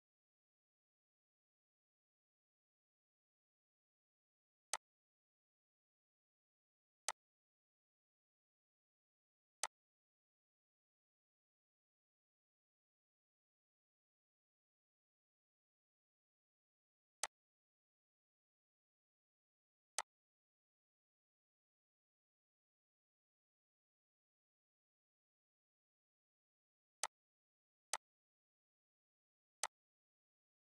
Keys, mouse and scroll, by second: 7.0-13.4 drag, 17.2 click, 19.9 click, 27.0 click.